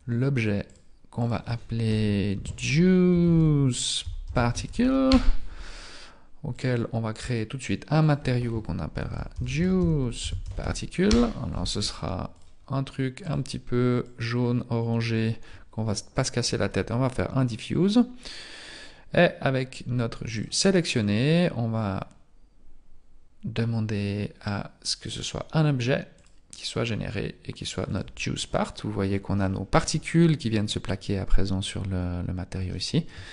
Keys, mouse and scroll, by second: 7.2 click, 11.1 click, 13.4 click, 18.3 right click, 25.1 click, 28.0 click, 28.6-29.4 scroll up 8, 29.4 shift+middle click, 31.5-32.1 scroll down 2, 32.2 scroll down 1, 32.7 shift+middle click.